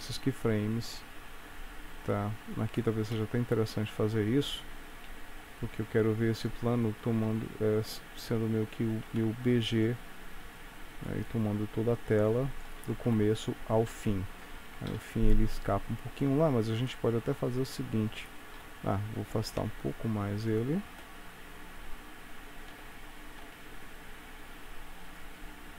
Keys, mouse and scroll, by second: 3.2 KP_1, 5.1 s, 7.3 KP_1, 8.9 s, 11.4 click, 13.2 shift+Right, 15.0 KP_3, 15.7-17.0 scroll down 3, 17.0 middle click, 18.7 KP_3, 19.7 g, 22.9 g.